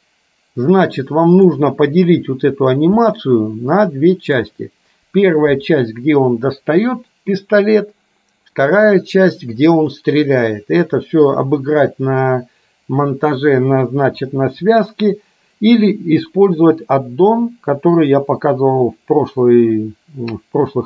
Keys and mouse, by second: 3.4-4.6 middle drag.